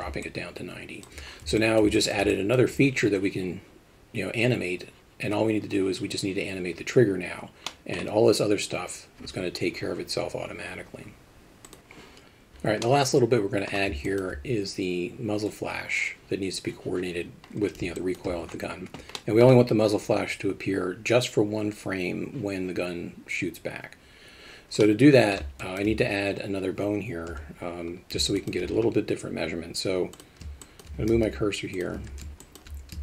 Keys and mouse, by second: 0.2-1.0 alt+middle drag, 1.6 middle drag, 1.9 alt+shift+middle drag, 2.3 alt+middle drag, 7.7 middle click, 12.8-13.6 middle drag, 14.0 alt+shift+middle drag, 18.0 alt+shift+middle drag, 19.1 middle click, 24.8-25.3 middle drag, 25.6 alt+shift+middle drag, 27.3 KP_7, 28.3 alt+shift+middle drag, 30.6 alt+shift+middle drag, 31.1 shift+s, 32.0 alt+a, 32.4 alt+shift+middle drag.